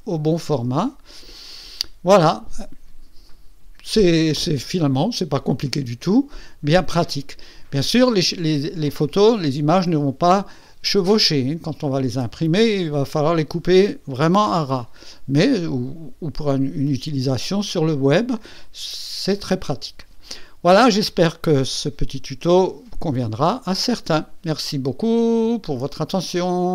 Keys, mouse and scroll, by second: 1.1 Escape.